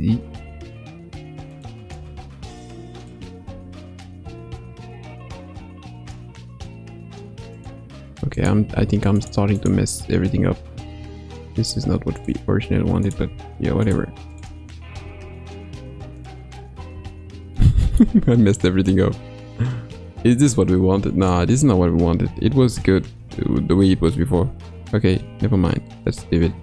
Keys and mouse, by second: 1.9 g, 3.4 s, 8.3 click, 9.1 shift+click, 9.6 shift+click, 10.9 g, 13.0 click, 13.8 click, 14.3 shift+click, 14.9 g, 16.9 Tab, 17.6 middle click, 18.9-21.4 drag, 22.1 ctrl+z, 22.4 ctrl+z, 22.6 ctrl+z, 22.8 ctrl+z, 23.1 ctrl+z, 23.3 ctrl+z, 23.5 ctrl+z, 23.8 ctrl+z, 24.0 ctrl+z, 24.2 ctrl+z, 24.4 ctrl+z, 24.6 ctrl+z, 24.8 ctrl+z, 25.1 ctrl+z, 25.5 ctrl+z, 25.9 ctrl+z, 26.3 ctrl+z.